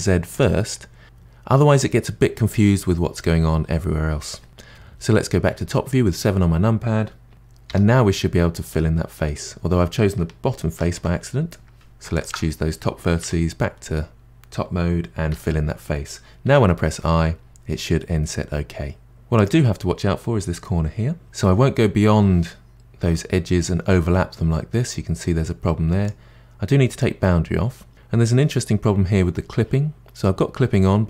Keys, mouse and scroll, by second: 0.9 scroll down 3, 1.1-2.8 middle drag, 4.5-6.4 scroll up 3, 7.7 f, 8.1-10.8 middle drag, 10.8 ctrl+z, 11.7 2, 12.1 alt+click, 13.2 KP_7, 15.3 f, 22.7-24.1 drag, 26.9 click.